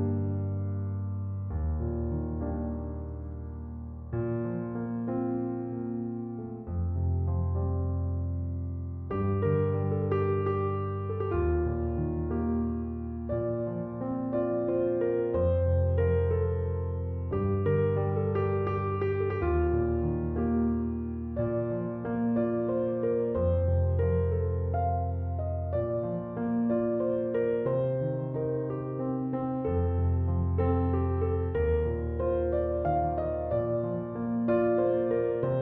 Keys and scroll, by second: 2.4 BackSpace, 13.4 space, 20.5 BackSpace.